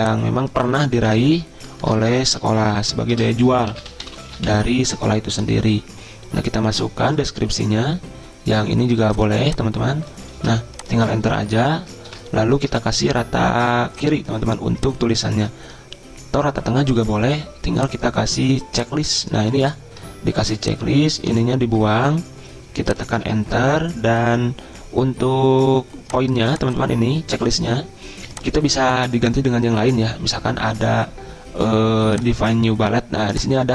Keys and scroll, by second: 0.7-5.0 typing, 10.4 ctrl+c, 11.3 Return, 11.8 Return, 12.1 ctrl+v, 12.7 ctrl+a, 21.3 BackSpace, 21.7 BackSpace, 23.2 Return.